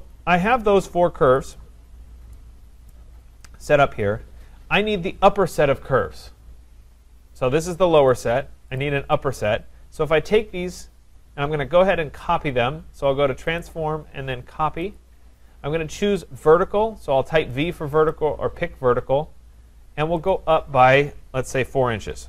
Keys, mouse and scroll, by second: 1.4 click, 1.5 click, 2.0-2.9 scroll, 2.9 right click, 3.1-4.0 scroll, 4.4-5.0 scroll, 7.0-7.9 scroll, 7.9 scroll, 8.1 click, 8.8 click, 10.3 click, 13.6 click, 15.0 click, 18.1 click, 20.3 click, 21.5 4, 22.2 shift+'.